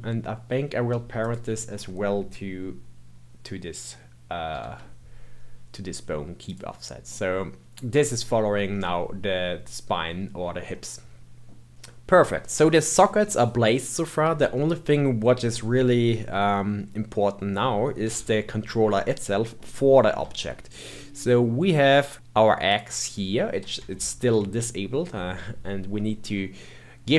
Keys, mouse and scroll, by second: 1.1 shift+click, 4.5 ctrl+p, 7.0-10.1 middle drag, 10.7-11.7 middle drag, 14.5-16.0 shift+middle drag, 16.0 scroll down 2, 18.0 KP_1, 19.4-20.0 scroll up 2, 20.3-22.1 shift+middle drag, 22.1 click, 22.7 click, 23.9 shift+middle click, 24.8 scroll down 1, 26.0-27.1 scroll up 2.